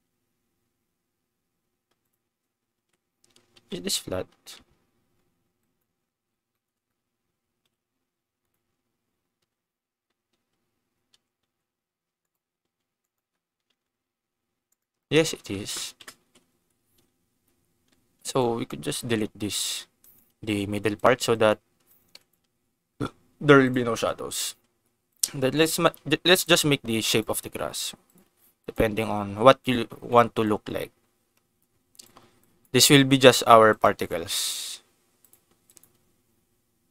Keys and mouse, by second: 2.0 click, 2.7 Tab, 3.5 KP_Decimal, 3.9 KP_3, 5.6 click, 6.4 shift+middle click, 7.6 KP_0, 9.4 KP_3, 10.2 t, 11.1 t, 11.4 r, 12.2 click, 12.6 g, 13.0 click, 13.6 r, 13.6 z, 14.6 click, 16.0 KP_0, 16.3 ctrl+s, 16.5 Tab, 18.3 click, 19.0 ctrl+x, 20.0 click, 20.2 g, 20.9 click, 21.2 click, 21.9 click, 22.1 click, 22.4 g, 23.6 click, 24.0 click, 24.4 g, 25.0 click, 25.5 click, 25.8 g, 26.4 click, 27.0 click, 27.2 g, 28.0 click, 28.6 click, 28.8 g, 29.6 click, 30.1 click, 30.6 g, 31.9 click, 32.5 click, 32.8 g, 33.2 click, 33.9 g, 35.2 click, 35.7 click, 35.9 g.